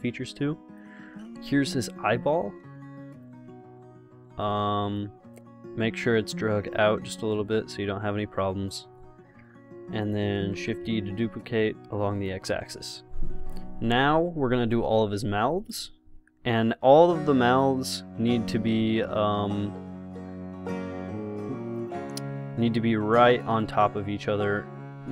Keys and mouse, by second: 1.3 g, 2.8 s, 3.7 g, 5.3 click, 6.1-8.9 drag, 9.7 KP_0, 10.7 shift+d, 16.8 s, 18.5 g, 20.1 s, 22.5 g, 24.8 s.